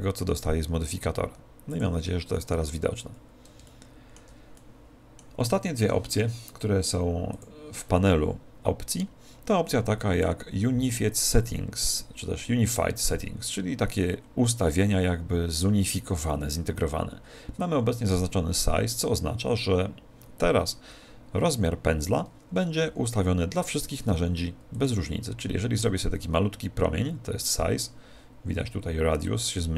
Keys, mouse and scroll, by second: 1.6 click, 3.3-7.2 middle drag, 7.3 click, 22.8 f, 24.8 click.